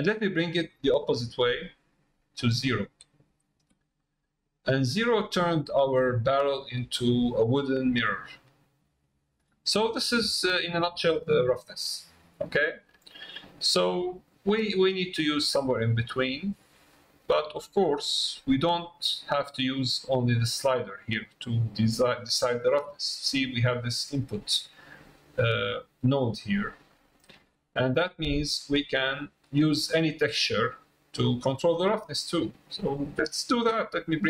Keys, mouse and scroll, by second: 0.2-3.3 drag, 4.0 middle click, 5.5 middle click, 6.7 middle click, 7.6 middle click, 8.4-9.6 middle drag, 9.9 middle click, 10.5 middle click, 14.7-18.7 drag, 19.9-22.4 drag, 26.4 middle click, 27.6 middle click, 28.5 middle click, 29.4 middle click, 30.5 middle click, 32.3 middle click.